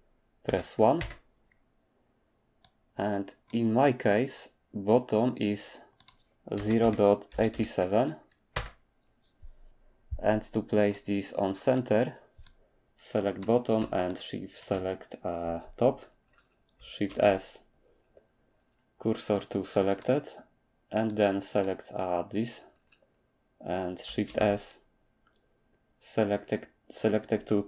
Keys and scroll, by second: 0.0-1.0 typing, 6.3-7.5 typing, 8.5 Return, 17.0 s, 24.3 s.